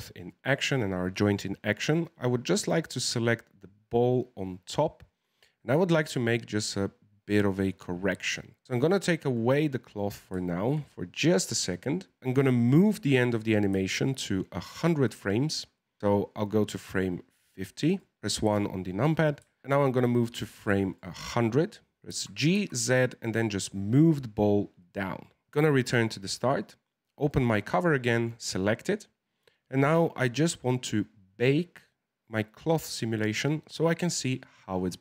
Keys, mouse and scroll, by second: 0.0-2.4 shift+middle drag, 2.4 right click, 9.2 click, 9.9-12.2 middle drag, 12.2 click, 13.9-16.0 drag, 18.2 middle click, 18.4 KP_1, 19.6-21.0 shift+middle drag, 21.0-22.0 drag, 22.0 g, 27.2 click, 28.0 right click, 29.0-30.0 scroll down 13, 30.0-33.1 scroll down 4.